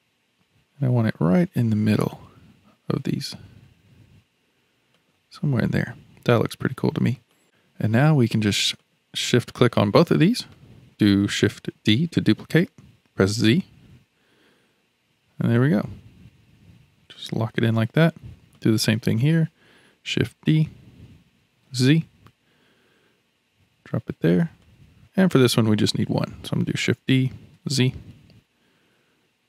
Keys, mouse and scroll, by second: 6.4-7.3 scroll down 4, 7.3 middle click, 7.4-8.4 scroll up 1, 8.4-8.8 scroll up 1, 8.8 click, 9.5 shift+click, 10.2-11.7 middle drag, 11.7 shift+d, 18.5 click, 20.4 shift+d, 25.3 click, 26.8 shift+d.